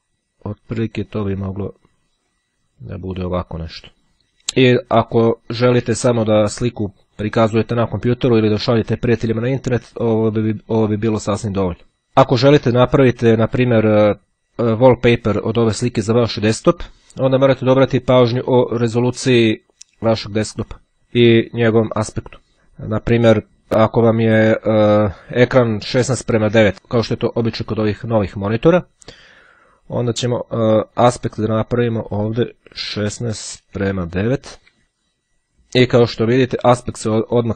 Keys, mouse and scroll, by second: 1.0-3.0 drag, 3.4 click, 4.6-7.6 drag, 29.6-31.6 drag, 31.9 click, 33.2 KP_1, 33.4 shift+KP_6, 33.6 shift+;, 34.2 shift+KP_9, 35.2 click, 36.3-37.5 drag.